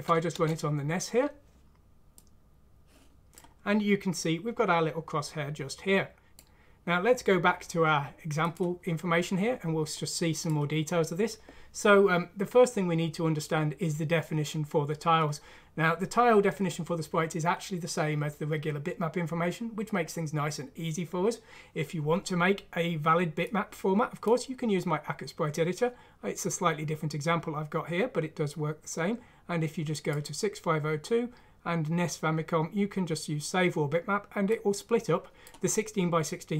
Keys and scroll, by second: 0.3 Return.